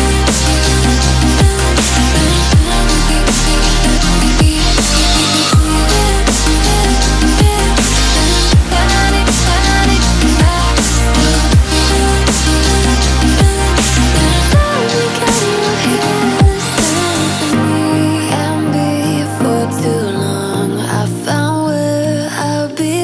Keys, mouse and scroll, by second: 0.1-2.5 drag, 14.1-14.6 alt+scroll up 2, 14.6-15.8 drag, 15.8 alt+scroll down 1, 16.2 alt+scroll up 1, 16.5 click, 19.1 F7, 19.7 click, 21.0 alt+scroll down 1, 21.3 alt+scroll up 1, 21.6-23.0 drag.